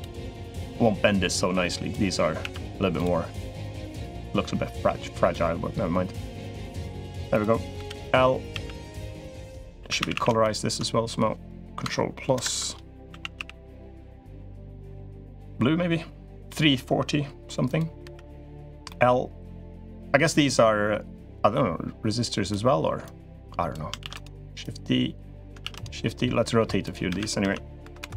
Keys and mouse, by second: 0.3-1.7 drag, 2.2 alt+e, 4.0-6.8 drag, 7.1 click, 7.8 l, 8.3 a, 9.3 click, 9.5 3, 9.8 a, 9.9 a, 10.2 alt+shift+click, 12.1 ctrl+KP_Add, 12.9 a, 13.1 g, 16.2 click, 17.8 l, 18.6 middle click, 19.6 click, 21.2-22.3 drag, 22.9 click, 23.8 shift+d, 24.5 click, 25.4 shift+d, 26.2 click, 26.8 r.